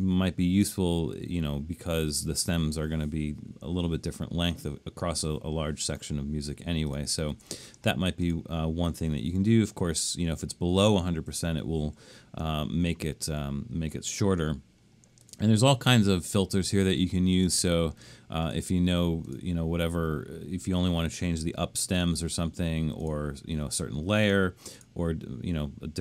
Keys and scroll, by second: 7.3 super+z.